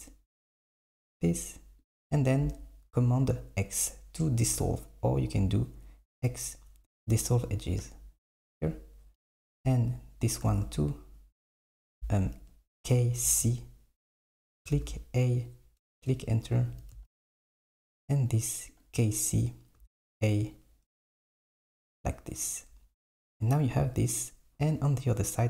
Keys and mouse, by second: 0.1 shift+click, 1.3 shift+click, 1.9 shift+click, 5.4 x, 9.2 k, 13.0 k, 16.7 k.